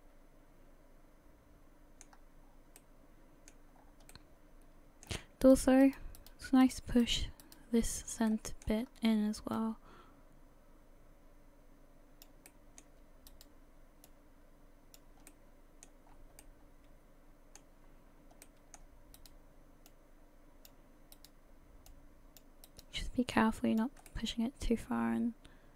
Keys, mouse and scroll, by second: 0.0 middle click, 2.1-2.4 scroll up 1, 2.4-2.8 scroll down 4, 2.8 middle click, 3.8-4.1 scroll up 3, 4.1 middle click, 5.5 right click, 5.8 shift+right click, 6.2 shift+right click, 6.6 shift+right click, 7.0 right click, 7.4 right click, 8.3 middle click, 8.9-9.6 scroll up 2, 9.6 click, 12.5 middle click, 13.3 right click, 14.1 click, 15.3 middle click, 16.1-16.4 scroll down 4, 16.6 middle click, 17.9-18.3 scroll up 2, 18.4 middle click, 19.2 right click, 19.9 click, 21.2 right click, 21.9 click, 22.7 right click, 23.4 click, 24.1 middle click.